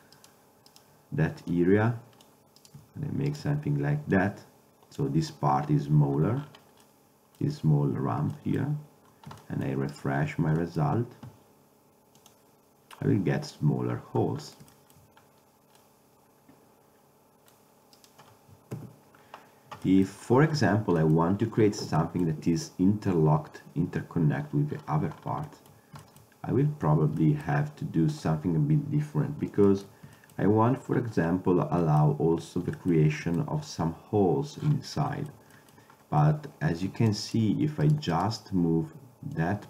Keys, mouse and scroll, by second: 2.5 click, 3.4 right click, 5.4 click, 6.3 Tab, 6.5-7.1 drag, 12.3-13.9 drag, 16.3 middle click, 16.3 middle drag, 16.7 middle click, 18.1 right click, 18.8 KP_7, 21.6 middle click, 22.3 middle click, 22.3-23.7 drag, 23.7 middle drag, 24.8-26.2 middle drag, 36.3 Tab.